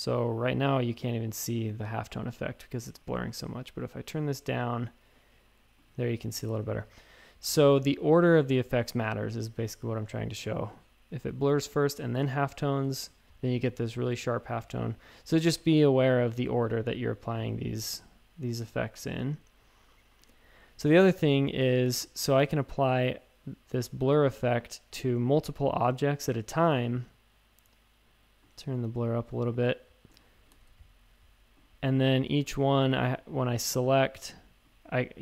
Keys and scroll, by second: 6.5 shift+super+a, 7.9 a, 12.9 shift+super+a, 14.7-15.0 typing, 19.2-21.2 typing, 30.5 shift+super+a.